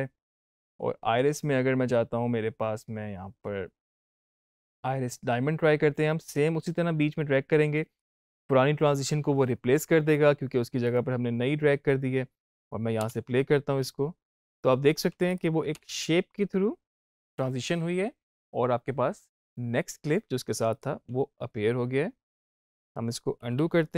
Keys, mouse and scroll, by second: 5.1-10.3 drag, 10.8 click, 12.9 space, 15.0 space, 15.2 click, 15.7 space, 20.6 click, 21.0 space, 23.3 ctrl+z.